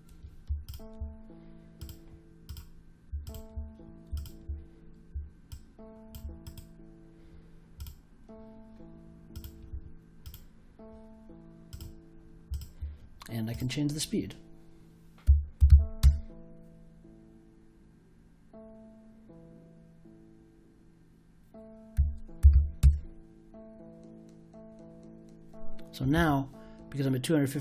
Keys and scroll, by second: 14.9-16.1 typing, 21.7-23.0 typing.